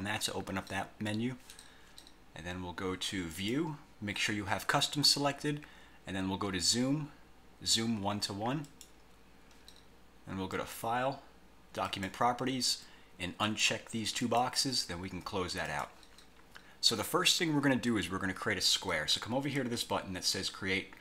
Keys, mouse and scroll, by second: 3.5 click, 8.7 click, 10.7 click, 11.9 click, 13.5 click, 14.3 click, 15.8 click.